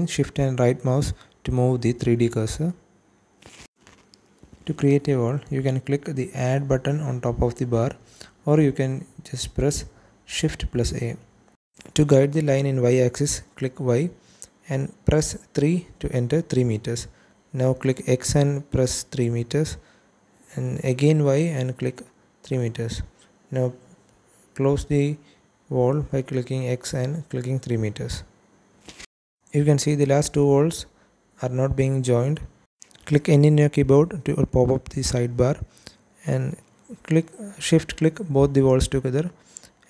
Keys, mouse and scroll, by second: 6.6 Escape, 10.3 shift+a, 11.9 click, 13.4 y, 14.5 KP_3, 14.8 KP_Enter, 16.2 x, 17.5 KP_3, 17.7 KP_Enter, 19.7 y, 20.7 KP_3, 20.9 KP_Enter, 22.7 x, 25.4 KP_3, 25.7 KP_Enter, 27.6 KP_Enter, 29.4 click, 30.1 click, 32.7 n, 33.9 click, 36.1 shift+middle click, 37.6 click, 38.0 shift+click.